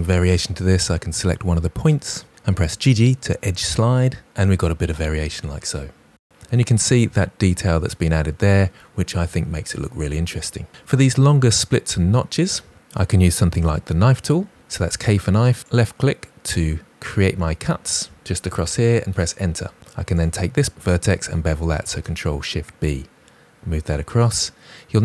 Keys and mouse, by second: 1.7 g, 1.8 g, 3.4 click, 3.9 g, 4.0 g, 4.3 click, 14.6 k, 19.5 Return, 20.0 click, 21.7 ctrl+shift+b, 24.1 click.